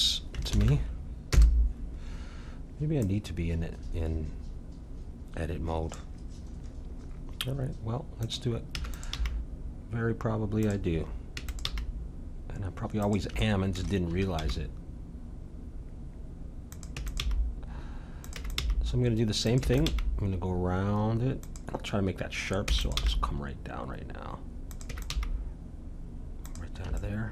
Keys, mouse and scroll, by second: 0.5 alt+m, 3.0-4.9 drag, 8.2-10.1 drag, 8.7 e, 9.1 g, 11.3 e, 11.7 g, 13.4-15.6 middle drag, 14.4 g, 17.0 e, 17.2 g, 18.4 e, 18.6 g, 19.6 e, 19.9 g, 22.6 e, 23.0 g, 24.9 e, 25.1 g, 27.0-27.3 middle drag.